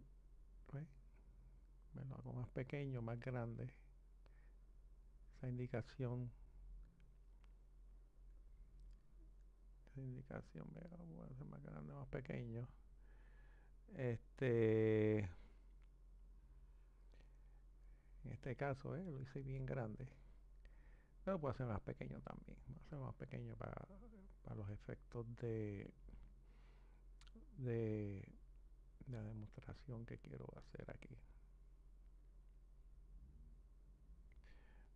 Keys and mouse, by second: 8.5 click, 16.0-19.0 drag, 23.0-26.8 drag, 27.0 click.